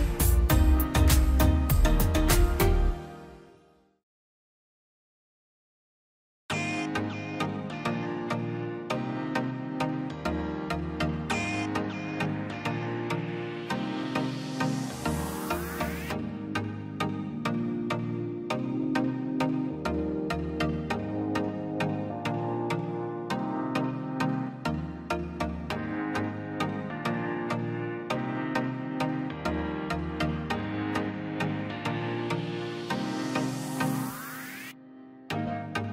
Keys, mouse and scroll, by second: 0.1 scroll up 1, 0.3 click, 0.5 scroll down 1, 1.1 scroll up 1, 1.7 ctrl+click, 2.0 scroll down 1, 2.6 click, 3.0-3.4 scroll up 1, 4.1 click, 4.3-4.6 scroll down 1, 8.3 click, 10.2 scroll down 1, 11.7 click, 12.4 scroll down 1, 12.6 middle click, 12.9-13.8 scroll up 1, 13.8 click, 14.6 scroll up 1, 14.9 click, 15.1 scroll down 1, 15.7 click, 16.2 middle click, 16.6 scroll down 1, 19.0 click, 19.2 scroll up 1, 19.5 click, 21.3 scroll up 1, 21.6 click, 22.2-22.6 scroll up 1, 22.7 click, 22.8 click, 23.3-23.7 scroll down 1, 24.1 scroll down 1, 25.1-25.5 scroll up 1, 25.5 click, 28.4 scroll down 1, 28.7 scroll up 1, 28.9 click, 29.6 scroll down 1, 30.3 click, 30.3 scroll up 1, 30.3 click, 32.6 scroll down 1, 33.0 scroll up 1, 33.1 click, 33.8 scroll up 1, 34.1 click, 34.7 scroll down 1, 35.5 click.